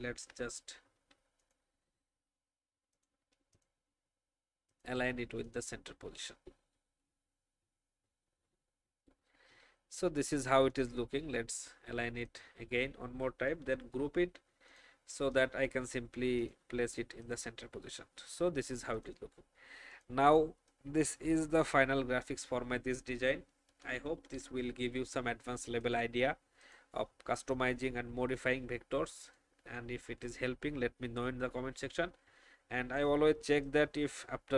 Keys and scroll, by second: 0.0 ctrl+alt+r, 7.0 shift+Down, 7.6 Up, 8.0 Left, 8.2 Left, 8.4 Left, 13.5 ctrl+g, 23.7 ctrl+2, 24.1 ctrl+3.